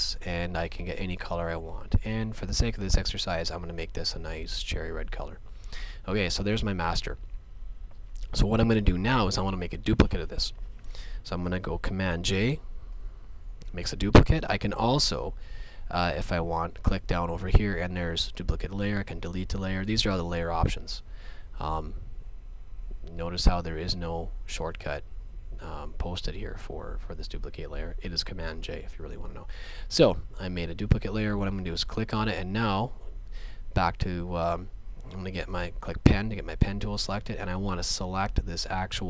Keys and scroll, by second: 12.9 super+j, 35.6 p.